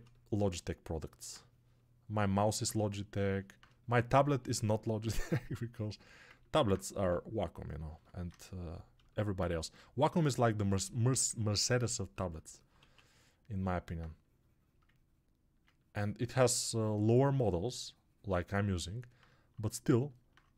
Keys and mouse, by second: 6.9 g, 12.7 1.